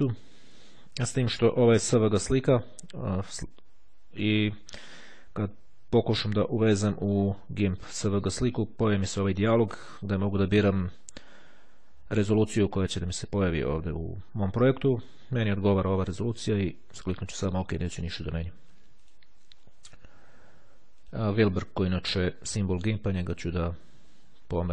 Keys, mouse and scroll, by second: 1.9 click, 16.3 click, 19.1 click, 21.2 click, 22.1-24.7 drag.